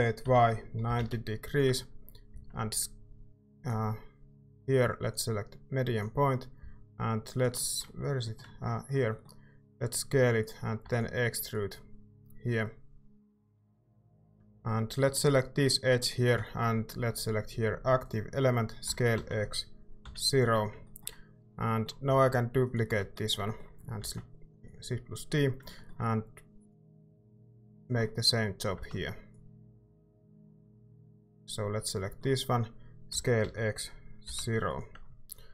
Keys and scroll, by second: 0.0-2.3 typing, 6.6 s, 9.7 s, 11.1 e, 18.8 s, 19.1 x, 20.0 0, 22.1-24.0 typing, 28.7 e, 32.9-34.2 typing.